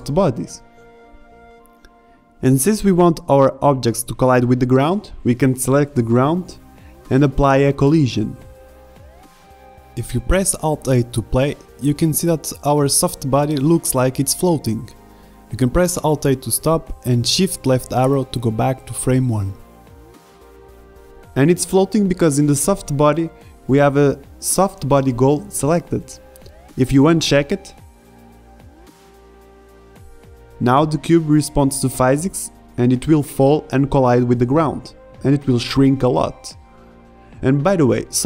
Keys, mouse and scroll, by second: 1.2-1.9 drag, 10.7 click, 11.8-12.9 drag, 13.0 alt+a, 16.6 middle click, 17.4 alt+a, 18.8 shift+Left, 27.7 alt+a, 27.7 shift+Left, 29.1-30.2 middle drag, 32.8 alt+a, 34.9 alt+a, 35.9 shift+Left.